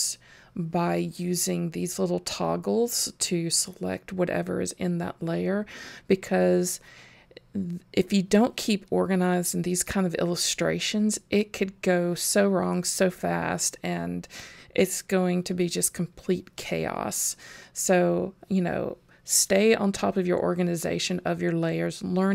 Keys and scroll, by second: 0.4 super+g, 7.9 super+g, 16.5 super+g.